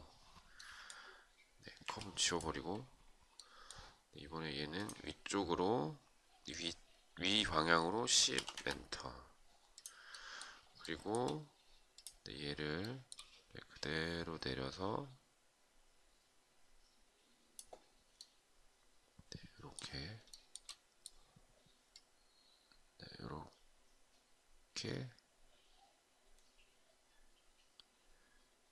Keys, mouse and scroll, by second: 1.4 Delete, 7.9 Return, 10.3 shift+right click, 12.3 shift+right click, 19.8 shift+right click.